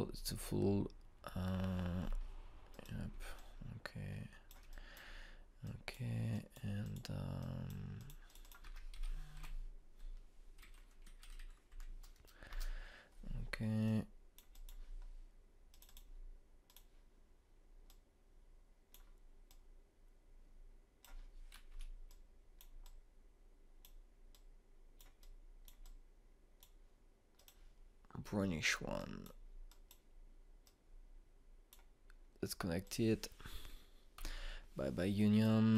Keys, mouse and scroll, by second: 3.7 click, 4.3-9.4 ctrl+drag, 9.6 ctrl+space, 9.9-10.4 typing, 13.5 Return, 14.8-22.7 drag, 22.7 Escape, 23.1-33.8 drag, 35.1 Delete.